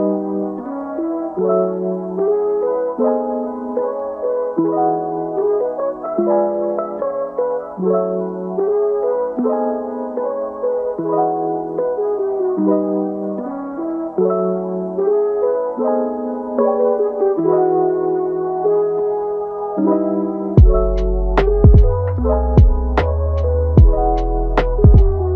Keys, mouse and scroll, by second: 1.1 scroll down 1, 1.2 middle click, 2.1-4.0 drag, 4.0 scroll down 1, 4.2 middle click, 5.1-5.5 scroll up 4, 5.5 shift+middle click, 6.3-6.9 scroll up 2, 6.9-8.3 drag, 8.3-9.9 middle drag, 9.9-11.5 drag, 11.5 scroll down 4, 11.8-12.8 middle drag, 12.8 scroll down 2, 13.1-14.8 middle drag, 14.8-15.4 drag, 15.4-16.2 scroll down 1, 16.2-16.7 scroll down 1, 16.7 click, 17.0-17.9 scroll up 3, 17.9 click, 18.3-19.7 middle drag, 19.7-20.1 scroll down 2, 20.1-23.9 middle drag.